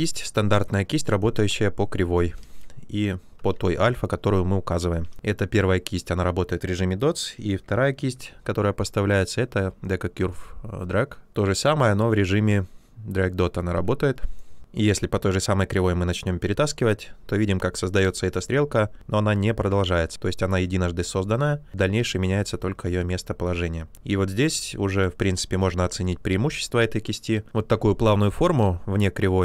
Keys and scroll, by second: 2.4 ctrl+z, 5.1 b, 7.3-8.6 typing.